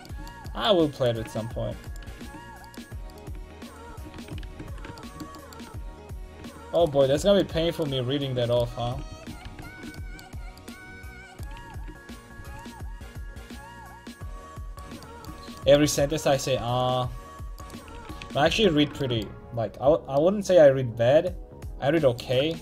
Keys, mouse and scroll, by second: 2.5 ctrl+x, 3.9 ctrl+x, 4.1 a, 4.4 ctrl+t, 4.6 a, 8.8 ctrl+x, 9.1 a, 9.4 ctrl+t, 9.6 a, 11.6 ctrl+x, 12.3 c, 16.6 c, 17.9 ctrl+x, 18.2 a, 18.5 ctrl+t, 18.7 a, 22.5-22.6 middle drag.